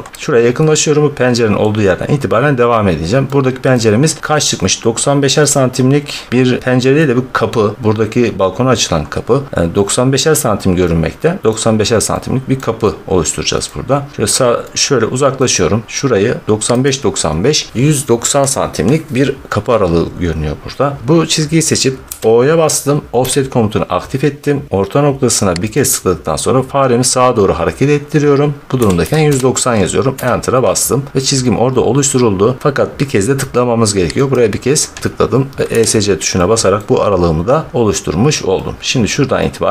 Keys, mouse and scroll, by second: 1.5 middle click, 2.1 middle click, 2.2 middle click, 2.4 middle click, 2.5 middle click, 2.7-3.3 middle click, 2.8 scroll, 4.1 scroll, 6.9 scroll, 7.8-9.7 scroll, 11.4 middle click, 12.5 middle click, 13.6 middle click, 13.8 middle click, 13.9 middle click, 14.1 middle click, 15.3-15.6 scroll, 15.6 middle click, 15.8 middle click, 16.8 click, 21.9 o, 23.1 Return, 25.6 click, 28.7-29.1 typing, 30.0 Return, 34.2 click, 35.5 Escape, 36.6 middle click, 37.0 middle click, 37.1 middle click, 37.8 middle click, 38.9 middle click.